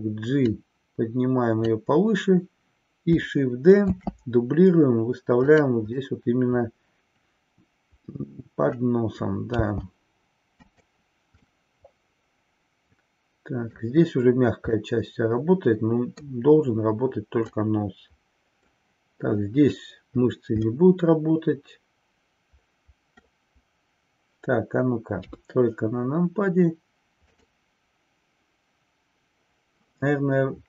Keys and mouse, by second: 0.4-1.9 drag, 3.9 shift+d, 6.0-8.9 middle drag, 10.8 click, 11.4-13.8 middle drag, 14.8-16.4 middle drag, 17.5-18.9 middle drag, 20.8-23.4 middle drag, 25.1 KP_3, 27.3 click.